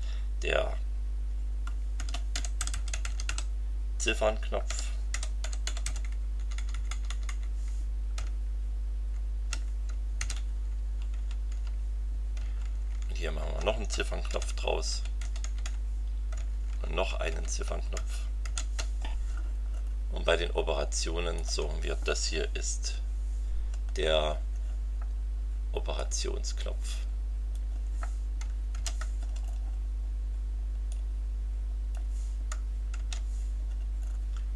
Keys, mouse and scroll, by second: 1.7-6.3 typing, 6.4 Delete, 8.2 shift+Left, 10.2 ctrl+c, 10.3 ctrl+Down, 11.5 ctrl+Left, 12.5 shift+Left, 14.3 ctrl+v, 14.5 ctrl+Down, 15.2 ctrl+Up, 15.4 ctrl+Left, 16.4 shift+Left, 18.4 ctrl+v, 19.7 scroll down 2, 21.3 click, 23.9-24.2 scroll up 2, 25.9-27.7 drag, 28.7 ctrl+c, 29.4 scroll down 2, 30.9-32.1 drag, 33.0 ctrl+v, 34.0-34.3 scroll down 2, 34.3-34.5 scroll up 2.